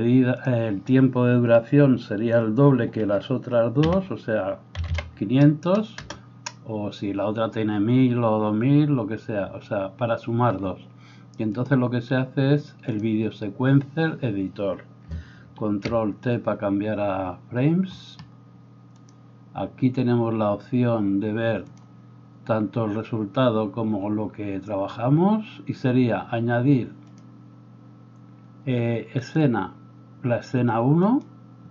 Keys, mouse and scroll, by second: 4.9 0, 15.5 ctrl+t.